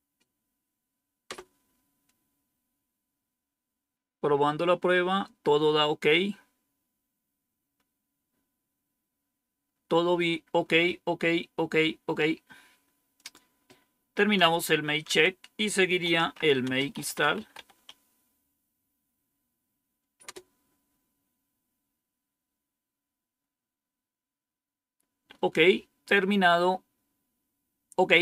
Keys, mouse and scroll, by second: 1.2 Return, 13.1 click, 14.4 Up, 15.0 Down, 15.7-18.2 typing, 20.2 Return.